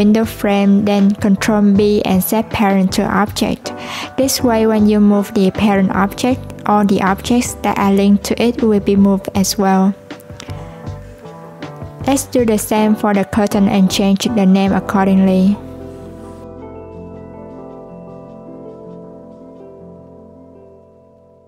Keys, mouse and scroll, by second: 3.1 ctrl+p, 5.8 click, 6.0-9.0 drag, 9.8 click, 10.4 shift+click, 10.9 shift+click, 11.8 shift+click, 12.9 shift+click, 14.4 ctrl+p, 16.2 click, 16.4-19.4 drag.